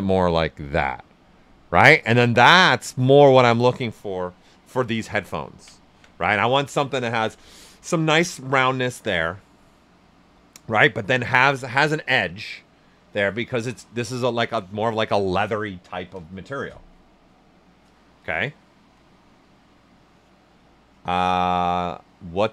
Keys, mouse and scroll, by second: 0.4 click, 1.0-2.9 right drag, 2.9 alt+right click, 4.8 typing, 5.7 ctrl+alt+right click.